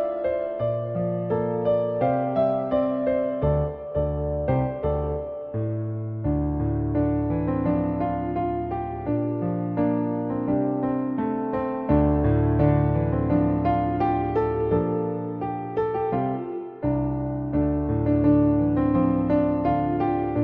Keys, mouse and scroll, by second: 0.8 ctrl+r, 2.7 shift+middle click, 3.2 middle click, 4.2 Tab, 4.2 `, 4.9 shift+a, 9.2 Tab, 10.6 s, 12.2 right click, 13.7 s, 14.9 Tab, 15.2 drag, 15.9 middle click, 17.4-18.7 drag, 19.4 click, 19.7 middle click.